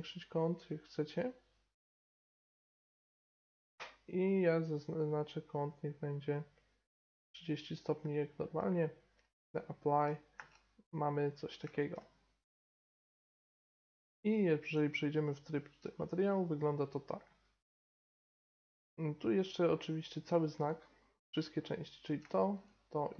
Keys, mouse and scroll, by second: 2.2-3.0 middle drag, 3.0-6.2 right drag, 4.3-6.2 drag, 9.4-10.9 drag, 10.4 Tab, 10.9-13.0 middle drag, 13.1 middle drag, 13.2 middle drag, 13.9 z, 16.4 middle drag, 16.6 middle drag, 17.9-19.5 right drag, 19.4 click, 19.8-20.7 right drag, 21.6-23.1 right drag.